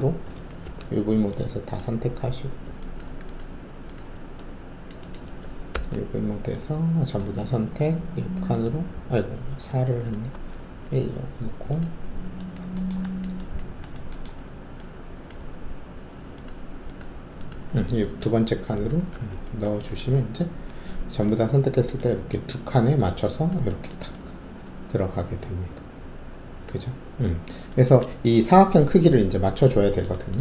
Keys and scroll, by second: 0.6 alt+4, 5.7 alt+4, 10.3 1, 19.1 alt+`.